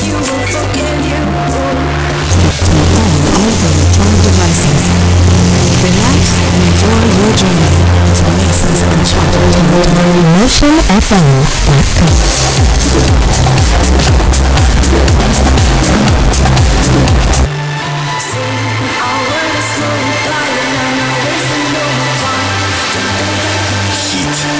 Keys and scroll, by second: 17.5 Page_Down.